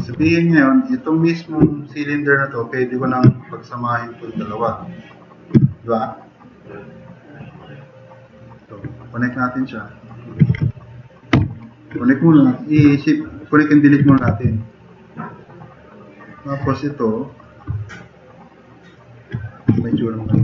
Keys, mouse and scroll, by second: 0.2 4, 5.7 click, 7.0-7.3 drag, 9.1 drag, 9.7-10.1 drag, 11.4 ctrl+shift+e, 13.0 drag, 14.1 e, 14.2 e, 14.5 click, 15.5 drag, 16.1 drag, 17.5 click, 17.7-18.1 drag, 18.5-19.0 drag, 20.3 shift+F6.